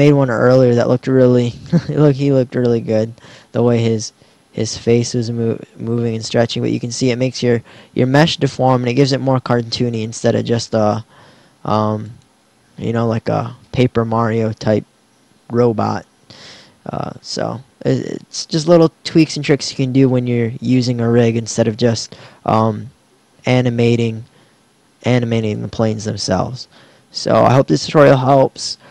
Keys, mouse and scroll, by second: 25.4-26.4 right drag.